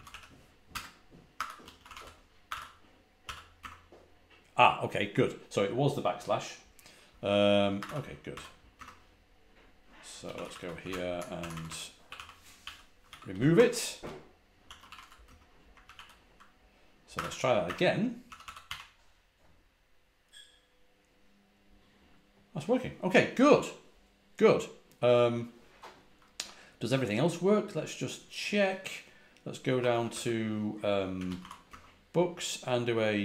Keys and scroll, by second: 0.0-3.5 typing, 7.4-15.3 typing, 15.7 ctrl+a, 15.8 ctrl+h, 16.8-19.0 typing, 29.5-31.8 typing.